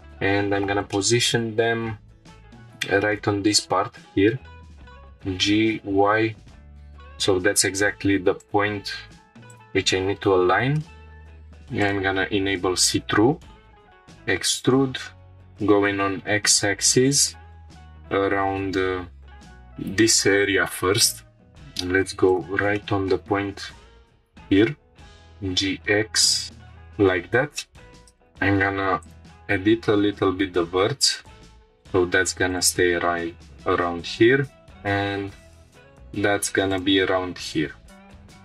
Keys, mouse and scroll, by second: 0.3 scroll up 1, 0.8 scroll up 3, 0.9-1.3 shift+middle drag, 1.5 scroll up 1, 4.8 g, 5.7 y, 8.4-9.6 drag, 10.3 scroll down 2, 10.8-11.3 shift+middle drag, 11.3 click, 13.8 e, 15.5 x, 22.3 shift+click, 22.7-23.2 shift+middle drag, 23.3-24.6 scroll up 8, 23.8 shift+middle click, 25.1 g, 25.1 x, 26.4 shift+click, 26.5-27.4 scroll down 8, 26.5-26.9 shift+middle drag, 27.6-27.9 shift+middle drag, 27.9 scroll up 1, 27.9 1, 28.2-28.5 drag, 29.0 shift+click, 29.9 g, 30.1 x, 32.5-33.2 drag, 34.2 g, 34.4 x, 36.7-37.4 drag, 37.4 scroll down 1, 38.1-38.4 scroll down 2.